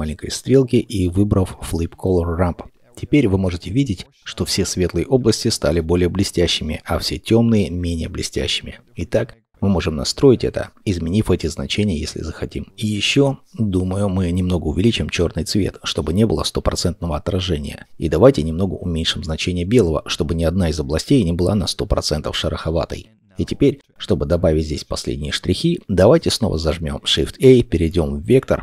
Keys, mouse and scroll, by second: 22.7-23.1 scroll down 1, 23.1 middle click, 25.4 scroll down 1, 25.8 middle click, 27.4 shift+a.